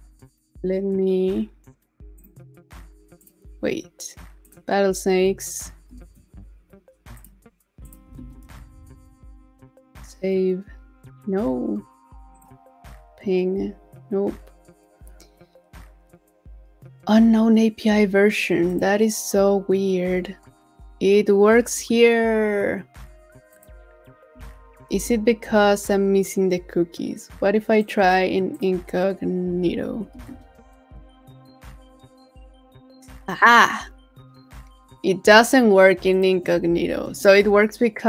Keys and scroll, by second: 8.2 super+a, 8.5 super+v, 24.9 super+w, 29.9 super+v, 36.7 super+v.